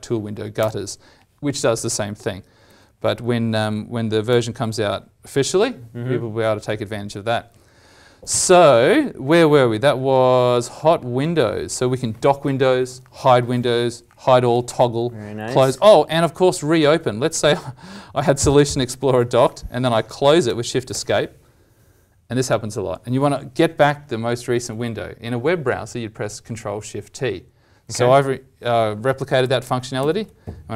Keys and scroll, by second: 2.6 alt+w, 17.3 ctrl+alt+l, 18.9 ctrl+Insert, 30.0 ctrl+shift+t.